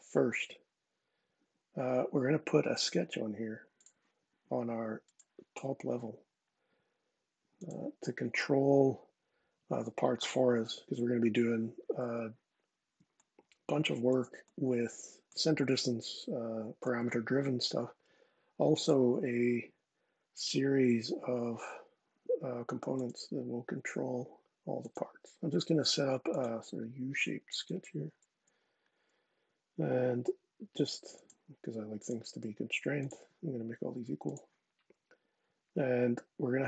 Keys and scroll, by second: 28.1 Escape.